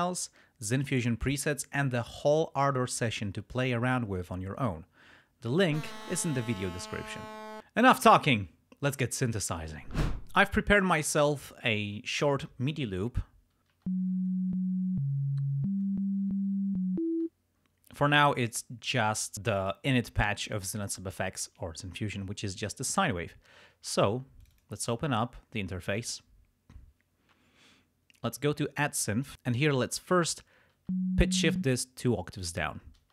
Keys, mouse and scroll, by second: 13.6 click, 13.8 space, 17.1 space, 19.2 click, 19.7 click, 24.5 click, 29.1 click, 29.3 space, 30.0 click, 30.8 space, 31.5 space, 31.7 click, 32.4 click, 33.0 space.